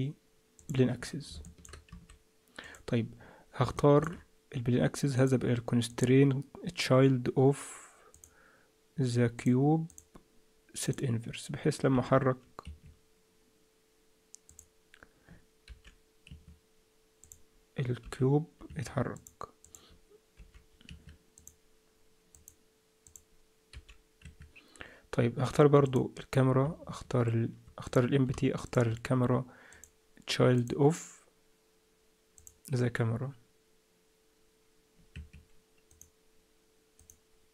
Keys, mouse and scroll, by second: 1.4 shift+middle click, 1.9 s, 3.1-3.6 scroll up 2, 3.7 shift+middle click, 5.1 click, 5.9 click, 9.3 click, 10.8 click, 11.9 g, 14.5 click, 15.6 g, 17.2 click, 18.0 g, 19.1 click, 19.6 click, 20.3 g, 21.3 click, 22.3 click, 23.7 g, 25.8 click, 27.8 click, 28.6 shift+click, 29.7 shift+click, 32.3 click, 35.9 click.